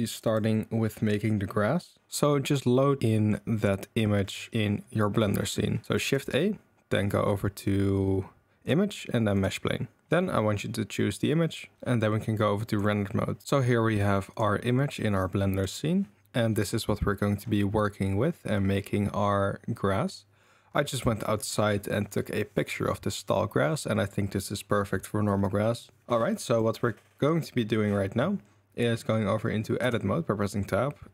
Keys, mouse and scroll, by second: 2.7 middle drag, 3.0 middle click, 3.9 middle click, 5.9 shift+a, 14.3 click, 15.5 click, 26.5 click, 29.8 Tab.